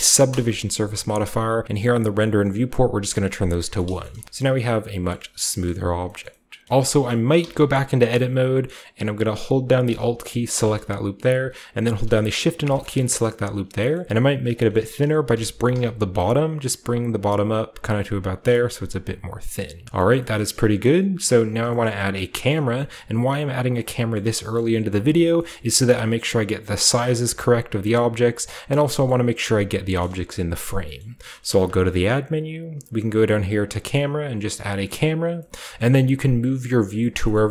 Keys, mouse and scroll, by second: 0.2 Return, 1.0 scroll down 1, 1.2 typing, 2.1-3.7 drag, 2.2 typing, 3.7-5.1 shift+middle drag, 4.1-5.1 typing, 5.3-6.8 shift+scroll up 3, 5.3 middle click, 5.6-6.0 middle drag, 6.2 middle click, 6.8-7.4 shift+scroll down 1, 7.1 middle click, 7.4 typing, 8.7-9.7 middle drag, 8.9-9.7 scroll up 1, 9.7-10.5 scroll up 1, 10.2-11.0 typing, 11.3 scroll up 1, 13.9-15.5 scroll up 1, 14.6-15.9 shift+middle drag, 15.0-15.8 typing, 18.3-19.7 drag, 18.4 Tab, 18.5 scroll down 1, 19.7 Tab, 19.8 Tab, 20.2 scroll up 1, 20.8 scroll up 1, 21.8 shift+middle drag, 21.8-22.2 shift+scroll up 1, 22.1 shift+middle drag, 22.2-23.6 shift+scroll down 1, 22.5 shift+middle drag, 22.9 shift+middle click, 23.6 shift+scroll down 1, 23.9 middle click, 24.1 shift+middle click, 24.5-25.3 shift+middle drag, 25.5-27.5 shift+middle drag, 27.9 shift+middle click, 29.0 shift+middle click, 30.0-30.8 shift+middle drag, 31.0-33.8 middle drag, 31.6 shift+a, 34.9 click, 35.5 shift+middle click, 35.8-37.0 middle drag, 37.1 shift+middle click, 37.2-37.5 shift+scroll up 3, 37.3 shift+middle click.